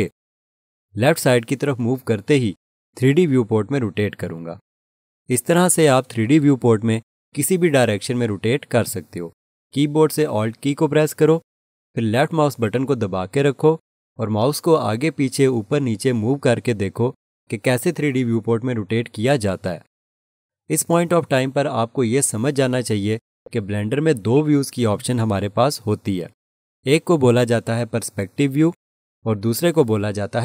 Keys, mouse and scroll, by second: 12.6 alt+click, 23.2-24.1 scroll up 1, 24.1 scroll, 24.3 alt+shift+click.